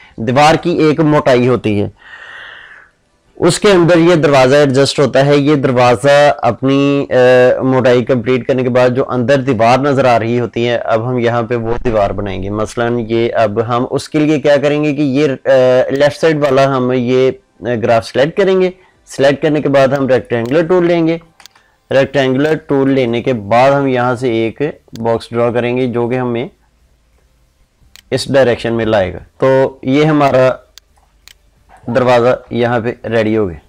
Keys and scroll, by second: 21.3 ctrl+space, 32.2 ctrl+z.